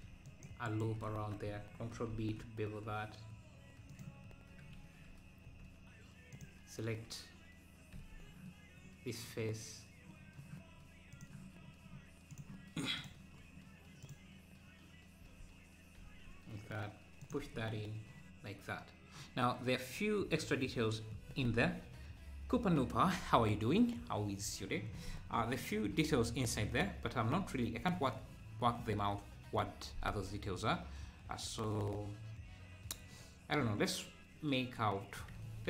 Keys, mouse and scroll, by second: 2.1 ctrl+b, 6.4 click, 11.1-13.0 drag, 13.3 scroll up 1, 14.1 click, 16.1 e, 17.4 Tab, 18.6 scroll up 1, 26.9 scroll down 1, 27.4 `, 34.0 `, 34.6 scroll up 2, 34.9 Tab, 35.4 Tab.